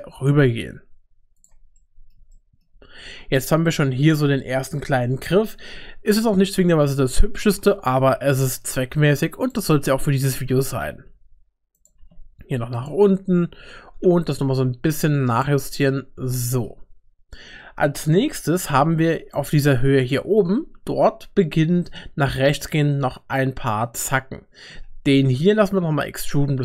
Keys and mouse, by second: 1.8 middle click, 2.3 shift+middle click, 3.6 Tab, 7.1 shift+middle click, 7.9 Tab, 8.4 middle click, 8.9 3, 9.7 middle click, 10.0 click, 10.2 g, 11.9 g, 13.5 g, 15.9 Tab, 16.4 shift+middle click, 18.3 Tab, 18.8 middle click, 20.0 click, 24.7 e.